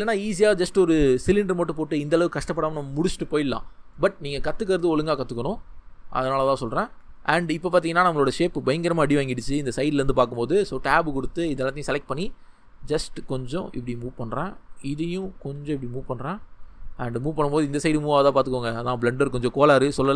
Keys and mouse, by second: 5.1 middle drag, 10.2 Tab, 12.0 g, 12.1-13.2 middle drag, 14.1 click, 15.4 g, 16.3 click, 17.2 middle click, 17.5 ctrl+z.